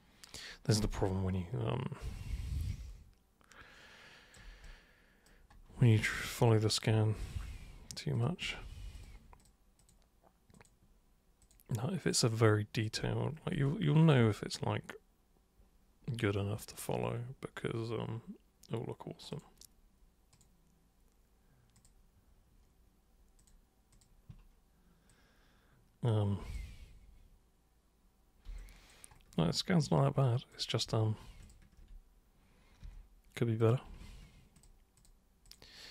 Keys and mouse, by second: 4.6 super+right click, 6.5 alt+super+click, 8.1 super+click, 9.0 shift+click, 9.4 shift+drag, 9.8 shift+click, 10.5 shift+click, 11.4 shift+click, 12.0 shift+click, 12.9 shift+click, 13.7-14.1 alt+super+drag, 19.3 super+click, 20.3 super+click, 21.7 super+click, 23.4 super+click, 23.9 super+click, 25.1-26.5 super+drag, 28.6 alt+super+click, 30.5 super+click, 31.4 ctrl+shift+super+click, 32.8 super+q, 33.6 super+click, 34.5 ctrl+shift+super+click, 35.0 ctrl+shift+super+click, 35.5 ctrl+shift+super+click.